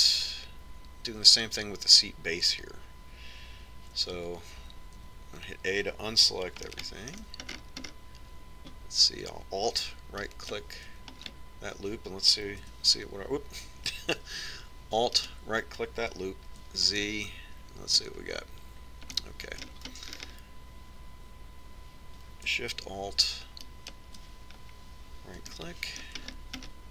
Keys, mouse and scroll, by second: 5.4 a, 5.8 a, 6.3 a, 7.9-11.1 middle drag, 11.5-13.0 right drag, 13.0-14.5 middle drag, 13.9 a, 16.4-18.3 right drag, 17.8 z, 18.3-21.0 middle drag, 21.3-23.4 middle drag, 25.0-26.8 right drag, 26.8-26.9 middle drag.